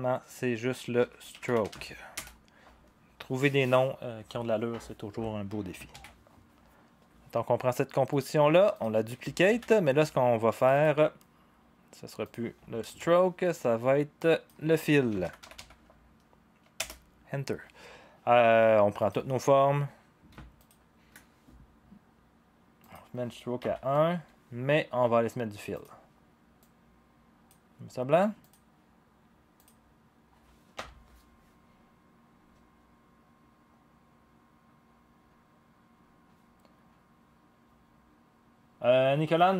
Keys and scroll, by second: 0.7-2.2 typing, 5.9 ctrl+s, 9.5 ctrl+d, 12.8 Return, 14.8-15.9 typing, 16.7 Return, 23.6 1, 24.1 Return, 30.7 0.